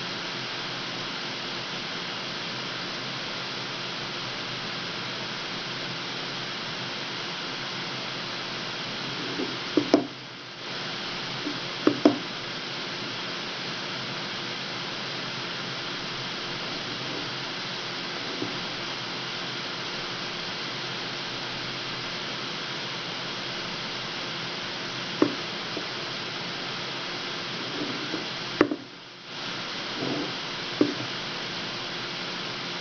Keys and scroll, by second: 10.1 w, 18.4 w, 30.4 w.